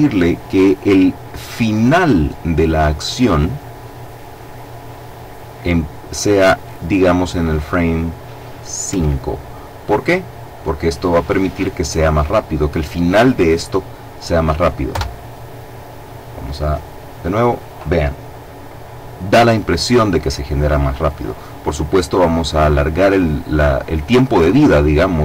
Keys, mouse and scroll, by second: 5.9 click, 8.6 KP_5, 14.6 KP_Enter, 21.6 click.